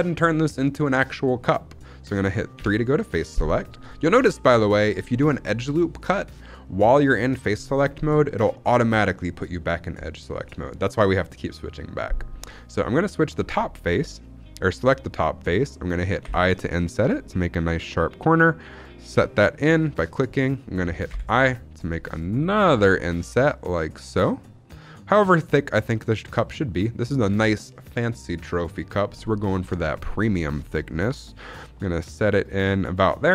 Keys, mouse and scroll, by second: 2.5 3, 13.3 click, 16.2 i, 18.5 click, 21.1 i, 32.8 click.